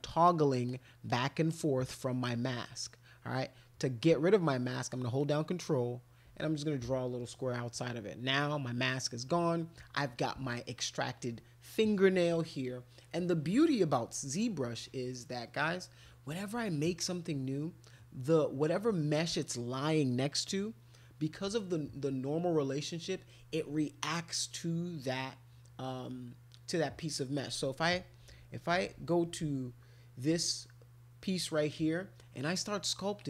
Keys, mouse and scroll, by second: 0.3 ctrl+click, 0.6 ctrl+click, 1.1 ctrl+click, 1.5 ctrl+click, 1.8 ctrl+click, 2.2 ctrl+click, 2.6 ctrl+click, 5.2 ctrl+click, 29.5 alt+click, 32.3 click, 32.9 click.